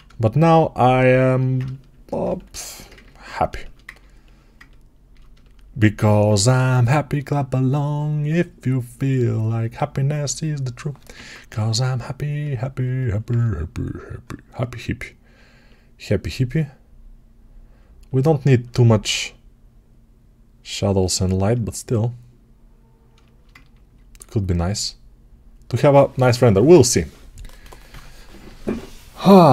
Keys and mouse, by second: 0.9-10.9 alt+shift+drag, 10.9-12.7 ctrl+right drag, 11.0 ctrl+Tab, 12.7-21.0 alt+middle drag, 21.0-23.0 alt+right drag, 23.0-29.5 alt+shift+drag.